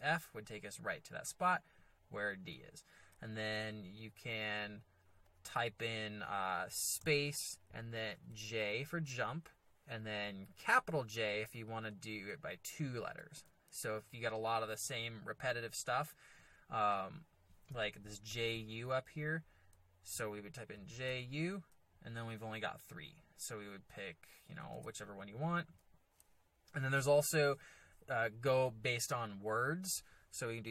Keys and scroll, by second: 7.0 space, 8.3 j, 13.3 shift+j, 20.7 j, 21.1 u, 24.8 s.